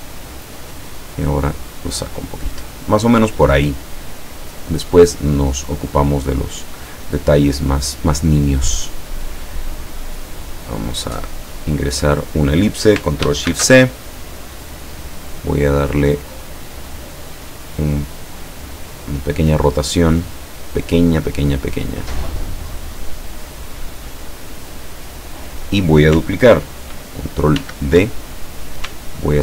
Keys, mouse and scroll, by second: 0.4 click, 0.9-2.1 drag, 7.0 click, 8.4-12.2 drag, 13.5 ctrl+shift+c, 14.5 click, 15.2 click, 16.9-19.0 drag, 19.4-23.1 drag, 24.3-25.9 drag, 27.7 ctrl+d, 28.4 ctrl+click.